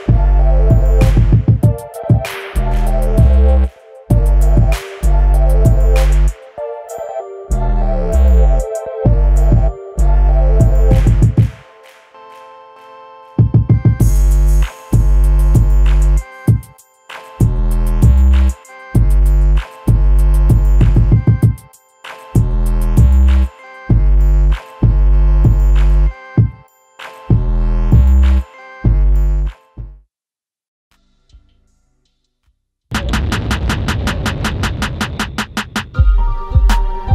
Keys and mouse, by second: 1.5-2.7 drag, 2.9 Tab, 4.7 Tab, 5.3 click, 6.1 Tab, 7.9 click, 8.4-10.5 drag, 11.0-11.6 middle drag, 13.1-13.8 middle drag, 14.1-15.3 middle drag, 16.5 KP_1, 17.5 shift+a, 21.4 ctrl+i, 23.2 h, 23.9 click, 24.6 KP_7, 25.8 s, 28.2 click, 28.4-28.9 middle drag, 30.0-32.5 middle drag, 32.7 Tab, 33.6 Tab, 35.1 s, 35.4 y, 36.3 click, 37.0 ctrl+a.